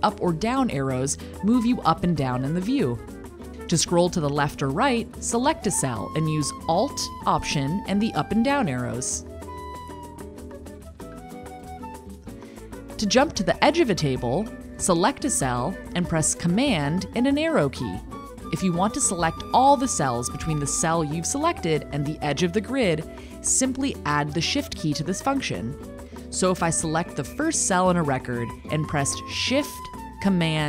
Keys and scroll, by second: 6.6 alt+Down, 28.6 shift+super+Right.